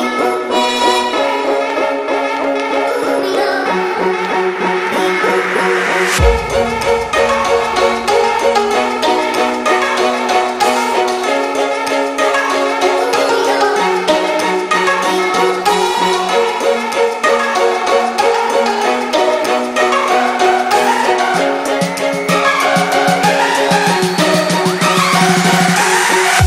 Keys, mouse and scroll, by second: 7.3-9.5 drag, 16.0-17.0 click, 19.8 click, 20.4 click, 21.2 drag, 24.9 click, 25.3 Up.